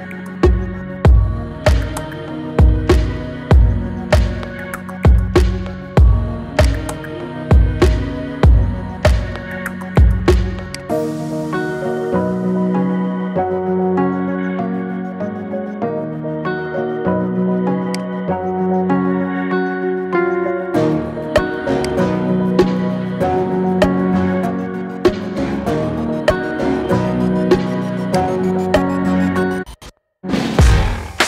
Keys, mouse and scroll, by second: 1.8-2.2 scroll down 5, 6.5 click, 8.2-8.5 scroll up 2, 13.0 click, 17.8-20.2 drag, 20.2-21.1 scroll up 4, 21.1-21.7 scroll up 1, 21.7-24.8 drag, 28.0-29.9 drag, 29.9-30.5 scroll down 3, 30.5-31.0 shift+middle drag, 31.0-31.2 scroll up 4.